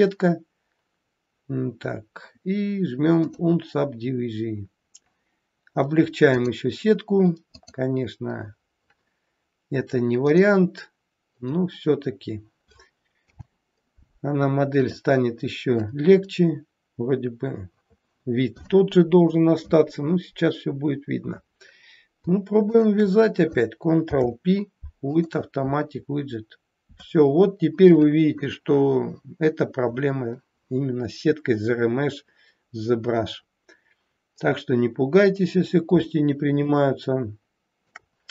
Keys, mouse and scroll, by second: 3.3 click, 6.4 click, 10.3 click, 13.2 n, 14.8 click, 16.2 scroll down 2, 22.7 shift+click, 24.0 ctrl+p, 29.9-31.3 scroll up 3, 31.3-33.0 scroll down 2, 35.0-35.9 scroll down 1, 36.7 shift+middle click.